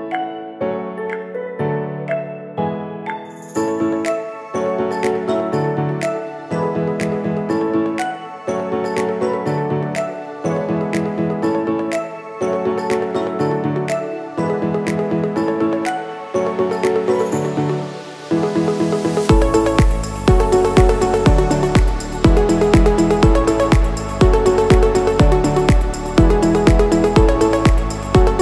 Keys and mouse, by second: 1.7 click, 5.1-7.6 drag, 6.6 KP_0, 10.0 click, 11.5 n, 13.2 shift+click, 13.6 ctrl+click, 17.1 click, 18.6 click, 21.2 click, 23.3 click, 24.4 click, 25.4-28.0 drag, 27.2 s.